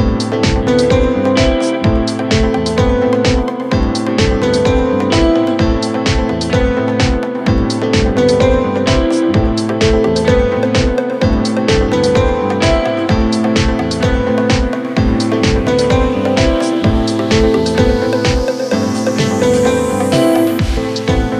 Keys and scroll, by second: 13.0 typing, 15.2-16.4 typing, 19.2-20.0 typing.